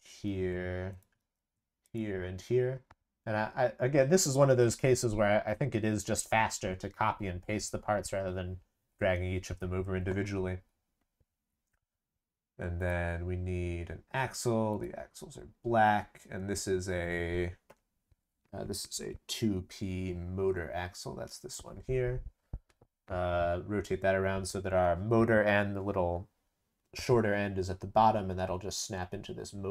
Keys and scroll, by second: 0.1 ctrl+v, 1.2 ctrl+v.